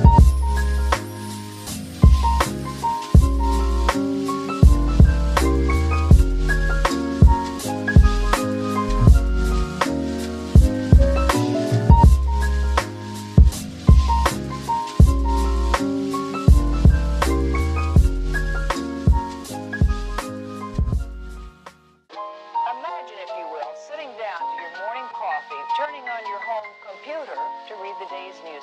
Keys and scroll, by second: 2.5 space, 3.3 q, 4.7-8.0 typing, 17.5-18.7 typing, 19.9 shift+Return, 22.6 m.